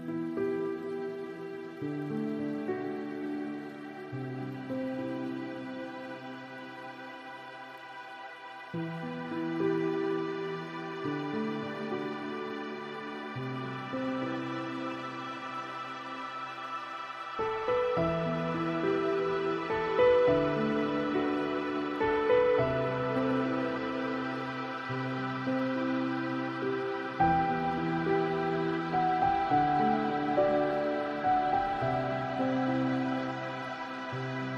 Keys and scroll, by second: 32.7 ctrl+space.